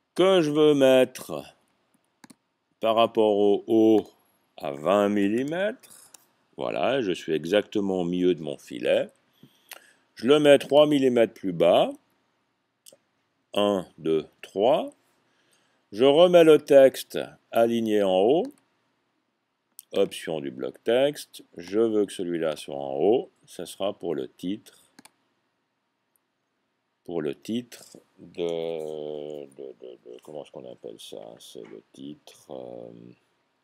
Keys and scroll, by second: 5.3-6.0 typing, 6.0 Tab, 8.0 typing, 12.0 Down, 12.7 Up, 13.4 Up, 14.0 Up, 14.4 Up.